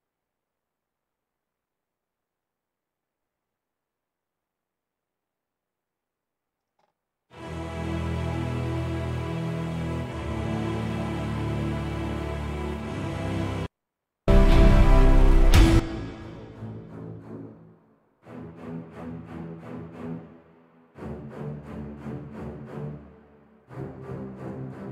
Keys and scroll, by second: 6.7 space.